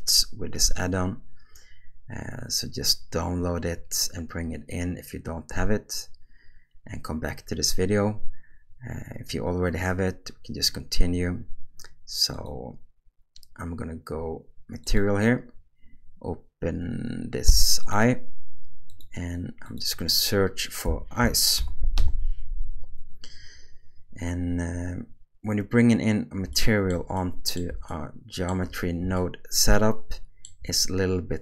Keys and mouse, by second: 14.8 click, 17.8 click, 19.6-22.0 drag, 26.5 shift+middle click, 27.2 middle click, 27.9-28.5 shift+middle drag, 29.2-30.4 shift+middle drag.